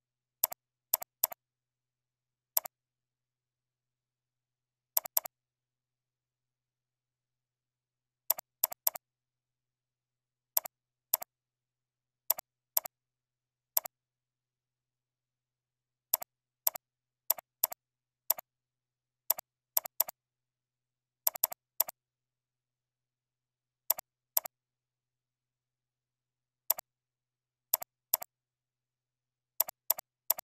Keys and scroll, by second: 3.1 ctrl+e, 4.0 shift+F3, 7.9 ctrl+b, 14.1 ctrl+e, 14.6 ctrl+a, 14.7 ctrl+e, 15.9 ctrl+b, 18.6 ctrl+a, 18.9 ctrl+e, 21.0 ctrl+b, 22.0 ctrl+b, 26.1 ctrl+b.